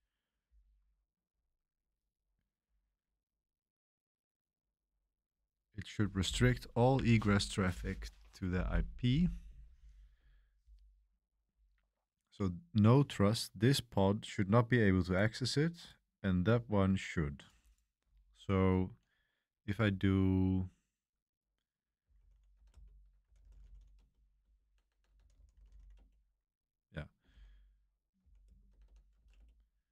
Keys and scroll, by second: 21.8-26.2 typing, 27.3 ctrl+l, 28.2-28.8 typing, 29.1 Page_Up, 29.3 Return.